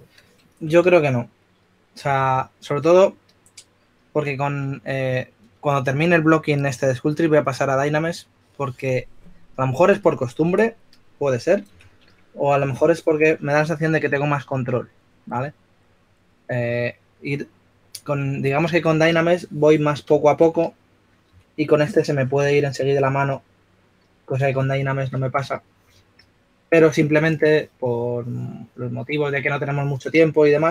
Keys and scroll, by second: 0.8 s, 2.0-3.4 typing, 12.8-13.9 typing, 21.3-22.8 typing, 26.4 s.